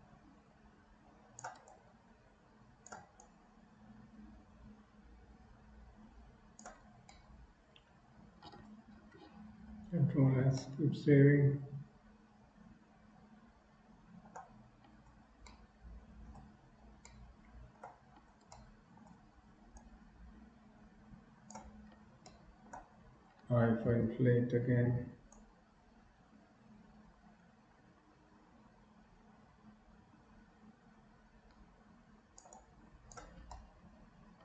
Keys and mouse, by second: 1.8-3.1 shift+drag, 3.2-6.6 shift+drag, 7.2-8.6 middle drag, 9.9 ctrl+s, 10.7-14.4 middle drag, 15.6 middle click, 17.2 middle click, 18.6 shift+middle click, 19.9-21.7 shift+drag, 22.3 shift+middle click, 25.5-33.2 drag, 33.7-34.4 middle drag.